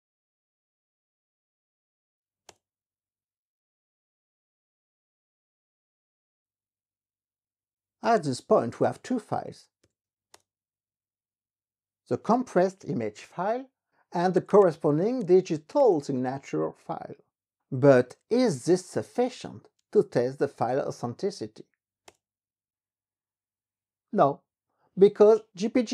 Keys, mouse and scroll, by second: 2.7 Return, 7.7-10.5 typing, 14.1-19.8 typing, 22.0 Return.